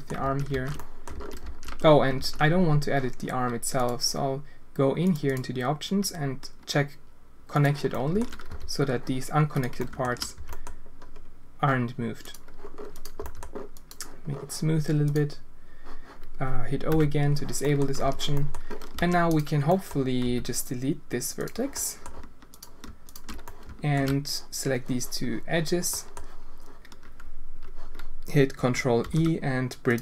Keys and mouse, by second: 0.2 ctrl+z, 0.7 click, 1.1 ctrl+z, 2.1 ctrl+z, 3.9-5.1 drag, 5.4-7.8 drag, 7.9 alt+shift+click, 8.4 g, 9.7 alt+shift+drag, 10.3 g, 13.2 g, 15.0 click, 16.9 o, 17.6 click, 17.9 z, 18.3 click, 18.9 alt+a, 19.6 drag, 20.2 x, 21.7 click, 22.5 alt+click, 23.4-23.9 alt+shift+drag, 25.9 click, 29.0 ctrl+e.